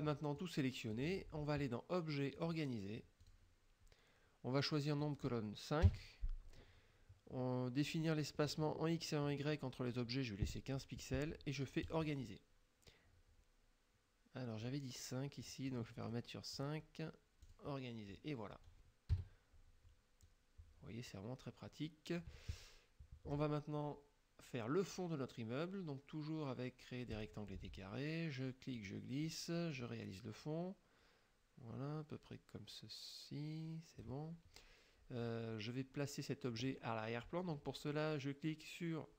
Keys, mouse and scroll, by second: 0.4 click, 2.4 click, 3.3 click, 5.1 click, 5.9 KP_5, 11.9 click, 15.4 click, 16.6 click, 17.5 click, 19.2 KP_Subtract, 20.3-22.5 drag, 27.2 click, 28.8-34.3 drag.